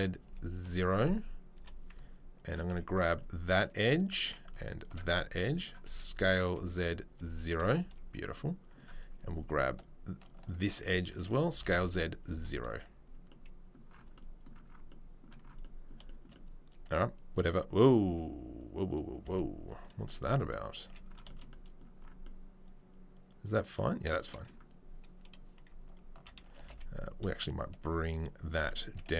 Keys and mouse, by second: 1.5 2, 2.4 alt+right click, 2.5-4.6 alt+middle drag, 4.9-29.1 alt+middle drag, 5.8 s, 9.7 alt+click, 20.8 a.